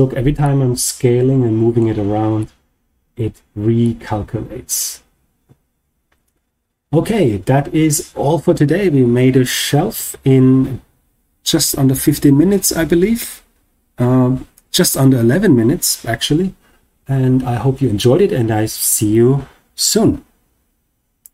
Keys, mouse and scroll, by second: 0.3-1.7 middle drag, 2.3-3.1 middle drag, 3.7-4.8 shift+middle drag, 5.6-6.8 scroll down 1.